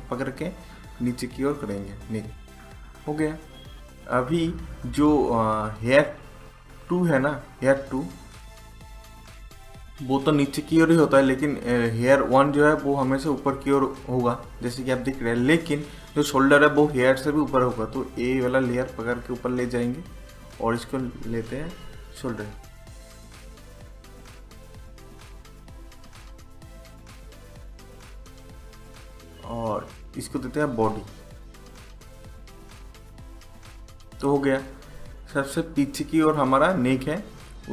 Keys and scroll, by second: 22.1-24.6 typing, 31.4-33.4 typing.